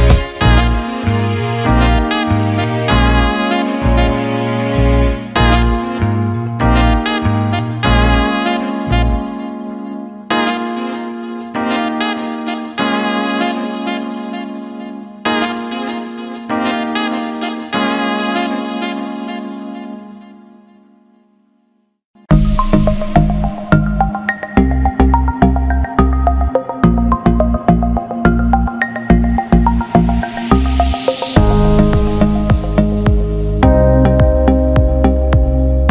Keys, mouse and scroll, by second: 0.5 shift+click, 0.6 shift+click, 1.2 shift+click, 1.6 alt+middle click, 4.9-7.6 drag, 7.9 alt+middle click, 11.1 alt+shift+middle click, 13.4 click, 16.0-21.8 drag, 22.1 ctrl+z, 25.4 middle click, 25.4 click, 26.2-27.4 drag, 29.4 click, 31.1 Tab, 35.6-35.9 drag.